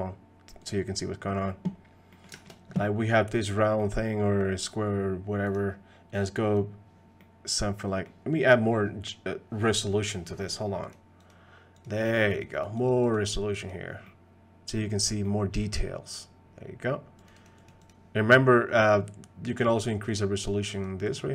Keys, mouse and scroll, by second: 1.0 middle click, 2.1 middle click, 2.3 shift+middle click, 3.8 middle click, 5.5-6.6 drag, 7.2 middle click, 10.9 click, 11.3 click, 12.3 click, 12.5 click, 12.8 click, 13.1 click, 14.1-14.8 middle drag, 15.2 middle click, 17.3 click, 17.6 click, 18.2 middle click, 20.1 click, 20.7 click, 21.1 click.